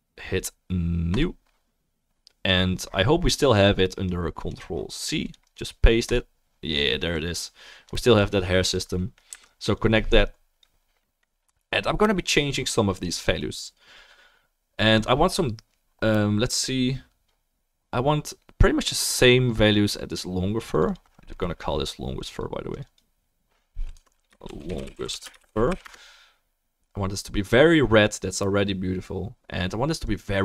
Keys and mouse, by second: 7.1-8.8 drag, 9.3 Delete, 9.7-22.1 drag, 22.9-30.4 drag.